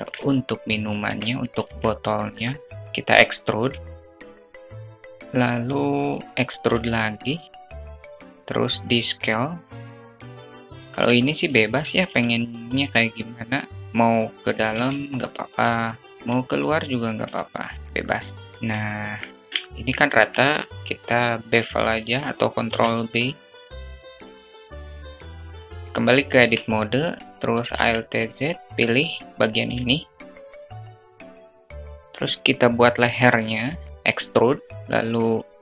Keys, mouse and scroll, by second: 0.6 Tab, 1.1 alt+z, 1.6 shift+click, 1.9 shift+a, 3.2 e, 5.9 e, 8.0 s, 10.2 click, 10.8 alt+click, 11.5 alt+z, 11.9 alt+click, 13.7 click, 14.2 ctrl+z, 15.6 e, 16.8 s, 18.5 alt+Tab, 18.5 alt+click, 19.3 click, 19.7 Tab, 20.5 click, 22.2 ctrl+b, 24.4 Tab, 24.6 alt+click, 24.9 `, 25.3 shift+a, 25.4 shift+click, 25.8 alt+z, 25.9 Tab, 27.3 alt+z, 28.1 click, 29.3 shift+click, 29.3 shift+a, 30.2 click, 33.4 e, 35.4 s.